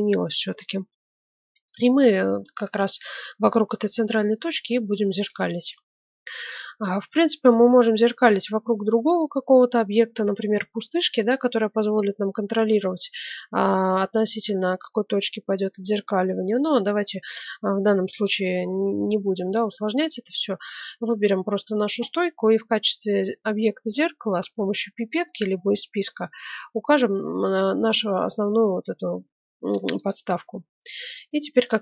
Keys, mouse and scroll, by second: 0.7 KP_1, 1.9 middle click, 4.2-6.6 middle drag, 15.4-17.2 middle drag, 19.5-21.2 right drag, 26.4-28.2 drag.